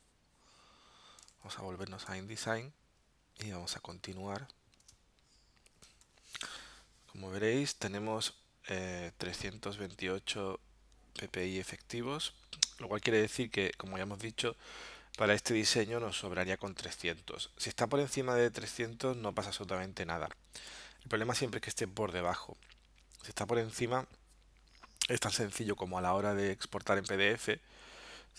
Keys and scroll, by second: 1.3 super+Tab, 3.8 z, 4.9 space, 6.0 v, 9.3 alt+super+0, 15.3 alt+super+-.